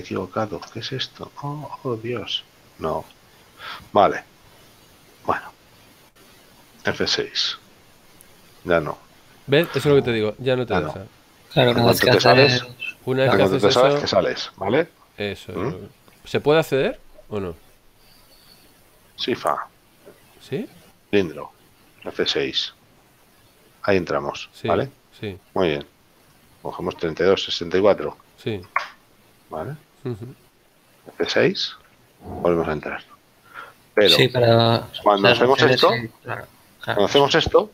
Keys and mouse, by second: 5.3 click, 8.3 F6, 10.3 right click, 11.3 middle click, 17.0 Delete, 17.3 click, 18.6 shift+a, 21.8 click, 23.0 F6, 26.7 click, 28.4 KP_4, 32.5 F6, 35.7 click.